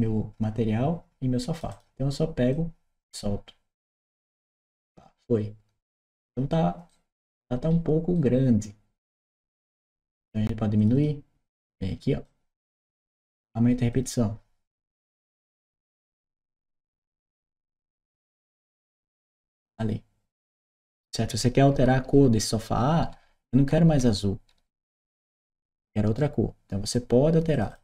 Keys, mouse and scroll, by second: 1.4 click, 1.5 click, 2.3 click, 6.7 right click, 8.0 right click, 10.6 click, 10.8 click, 12.1-12.6 drag, 13.2 click, 13.7 click, 15.4 4, 15.8 click, 16.9 Return, 18.2 click, 19.0 click, 19.6-26.0 right drag, 21.5 w, 22.0-26.0 drag.